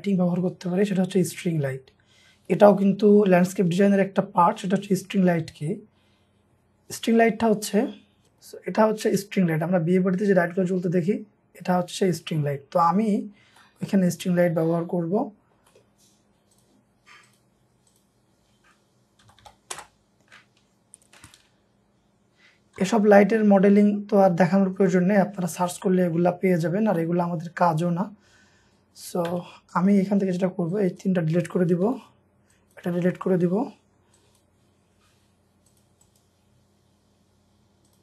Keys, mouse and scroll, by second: 8.3 shift+middle click, 9.0 space, 9.9 scroll up 1, 10.5 middle click, 11.1-11.4 scroll up 1, 12.7-13.1 scroll down 1, 13.1-13.7 scroll up 1, 14.1-14.7 scroll down 1, 14.9 scroll up 1, 15.2-15.7 scroll down 1, 15.7 middle click, 19.0-19.9 typing, 20.7-21.0 scroll down 1, 22.6-23.3 typing, 23.0-25.1 scroll up 1, 25.1-25.6 scroll down 2, 25.9 shift+middle click, 26.6 scroll up 1, 27.0 middle click, 27.4-27.9 scroll up 1, 29.3 space, 29.9 double click, 30.5 scroll up 1, 31.9 Delete, 32.9 Delete, 35.1-36.1 scroll up 1, 36.1 right click.